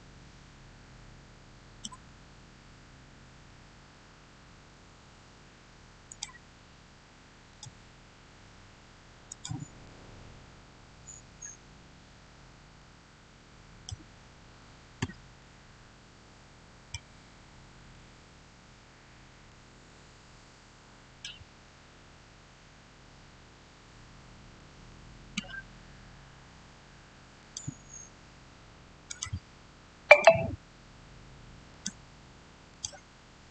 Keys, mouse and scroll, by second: 5.9 click, 9.8 scroll down 1, 12.2 Caps_Lock, 12.6 middle click, 15.2-17.2 shift+middle drag, 17.2 shift+scroll up 1, 17.8-21.9 shift+middle drag, 21.9 shift+scroll down 1, 27.2 shift+scroll down 1, 27.3 click, 28.3-28.9 scroll down 1, 28.9 click.